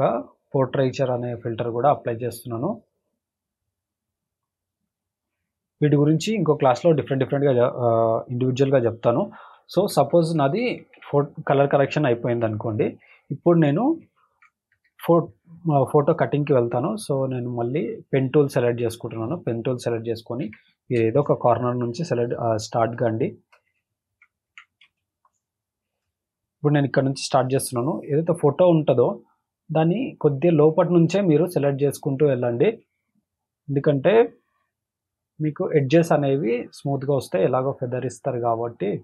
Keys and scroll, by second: 9.8 ctrl+=, 10.6 ctrl+-, 14.3 ctrl+=, 20.5 ctrl+=, 21.0 space, 21.4 space, 24.1 ctrl+=, 25.0 space, 25.5 space, 32.2 space, 32.7 space.